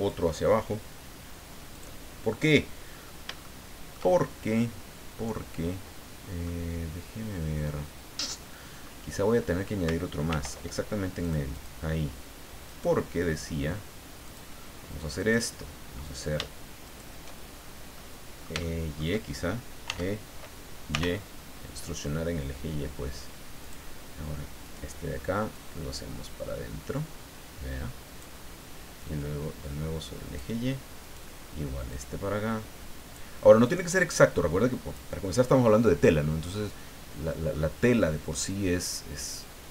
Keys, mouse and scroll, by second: 1.7 click, 2.9-3.3 scroll up 1, 3.4 shift+middle click, 6.4-9.0 middle drag, 10.3 ctrl+r, 11.2 click, 12.6 right click, 14.2 click, 15.2 right click, 16.8 shift+right click, 17.9-19.2 middle drag, 19.9 e, 20.9 y, 21.5 middle click, 23.6 click, 24.6 right click, 25.5-28.4 drag, 29.0-30.6 drag, 31.0 right click, 31.9-33.3 drag, 33.6-35.1 drag, 35.2 scroll down 1, 36.2-37.7 middle drag.